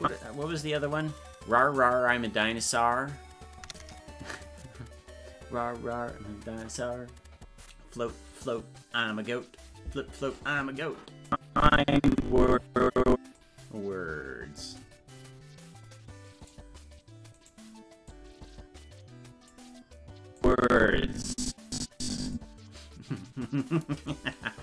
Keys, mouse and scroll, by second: 0.0 click, 11.3-13.4 drag, 14.6-16.5 drag, 17.4 right click, 18.1-19.5 drag, 20.4-22.3 drag.